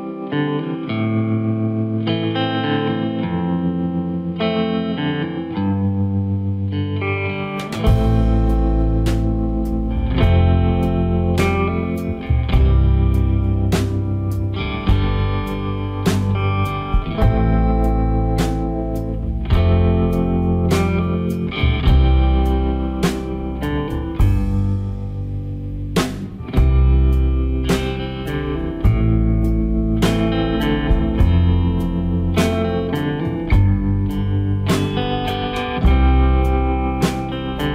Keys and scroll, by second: 0.4 Return, 1.3 Up, 8.5 ctrl+g, 12.8 ctrl+j, 24.4 Delete, 37.3 Delete.